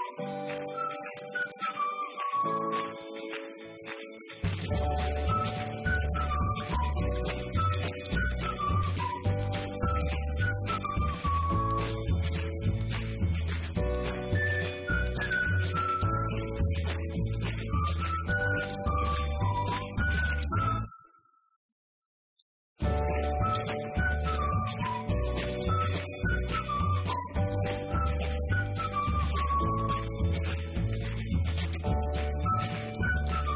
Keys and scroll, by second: 0.7 BackSpace, 6.2-11.1 typing, 15.5 BackSpace.